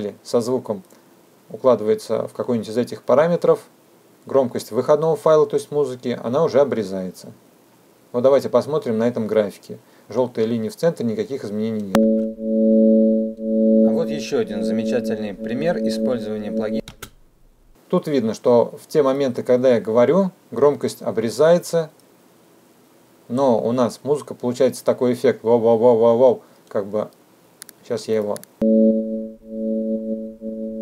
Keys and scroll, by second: 10.1 space, 15.3 space, 27.4 space, 30.0 space.